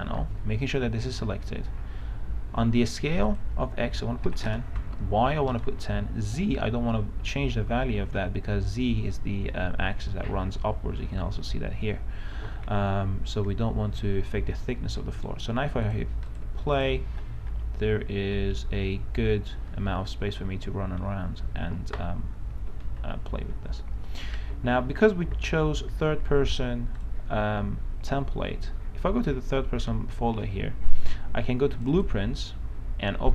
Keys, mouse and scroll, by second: 4.5 KP_0, 5.0 Tab, 5.9 Tab, 15.6 right click, 16.1 click, 17.1-19.5 typing, 22.8 Escape, 27.4 click.